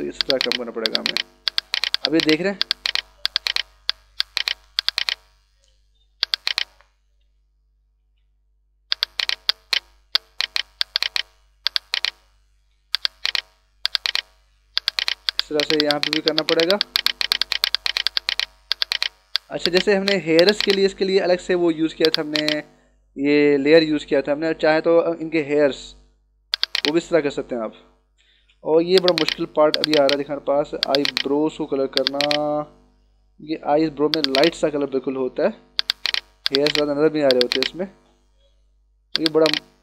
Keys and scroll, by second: 2.7 [, 5.5 [, 7.0 ], 8.6 [, 10.0 [, 11.5 [, 12.6 ], 25.1 [, 27.2 [, 28.3 ctrl+alt+z, 35.0 [, 38.3 ].